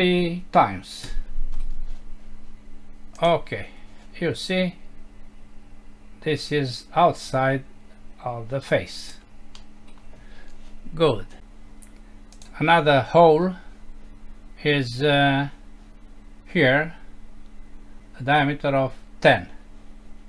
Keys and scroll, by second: 9.6 F6.